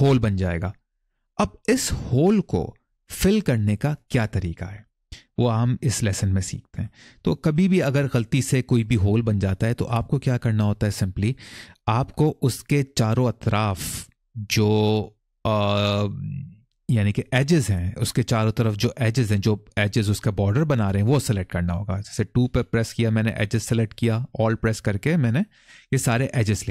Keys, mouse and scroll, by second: 3.4-3.8 scroll down 1, 3.8 middle click, 5.0-5.5 scroll up 1, 5.5 middle click, 6.1 shift+middle click, 22.2 2, 25.5 alt+click.